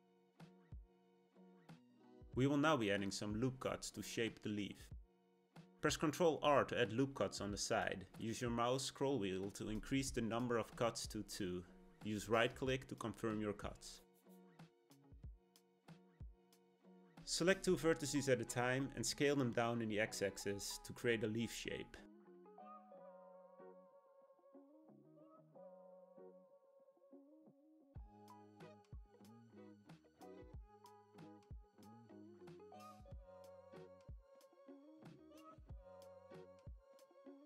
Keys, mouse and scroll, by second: 4.0 r, 17.3 click, 20.5 s, 25.1 click, 26.3 s, 29.4 click, 30.6 s, 34.0 click, 34.5 s, 36.7 click, 37.2-37.4 middle drag.